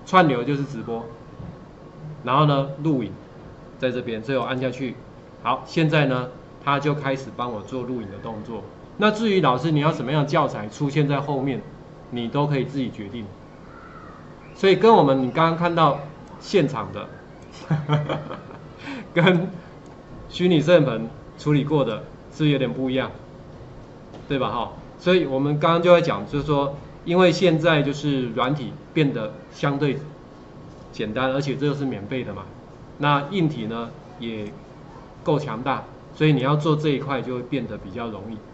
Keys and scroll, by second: 6.0 ctrl+4.